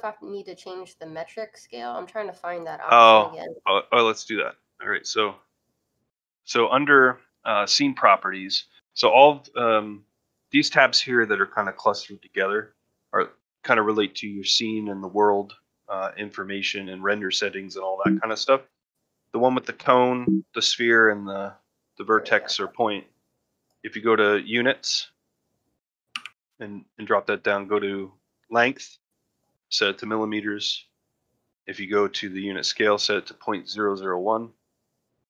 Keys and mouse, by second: 4.7-6.3 drag, 21.7 click.